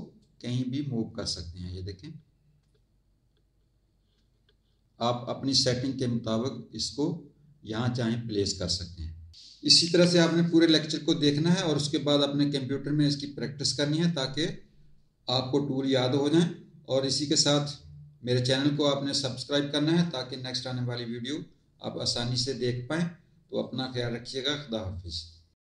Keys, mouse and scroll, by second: 0.2 click.